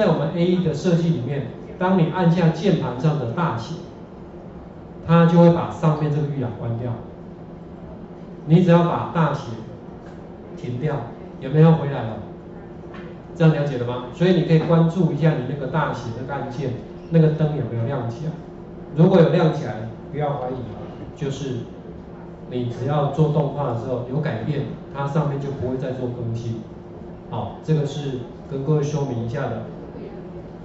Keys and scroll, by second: 10.5 Caps_Lock, 20.5 ctrl+z.